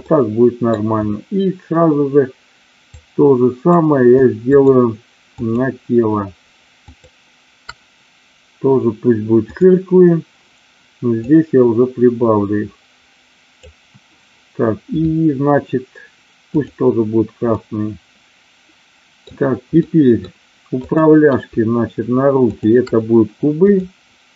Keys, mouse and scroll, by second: 0.1 middle click, 2.9 click, 4.6-5.7 shift+drag, 9.6 click, 11.1-13.5 drag, 16.4 click, 17.5-19.1 middle drag, 19.8 middle click, 20.8-22.1 drag, 22.3-23.5 shift+drag, 23.7-24.3 drag.